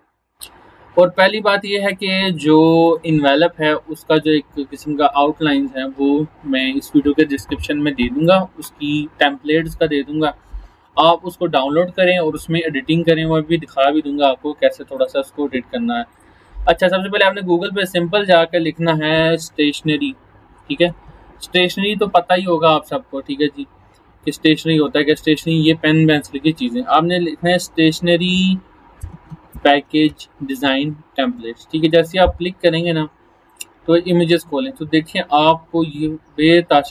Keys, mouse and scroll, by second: 1.3 click, 14.9 click, 19.6-21.5 typing, 25.0 space, 28.7-30.1 typing, 31.4 Return, 33.5 click, 35.6 scroll down 1.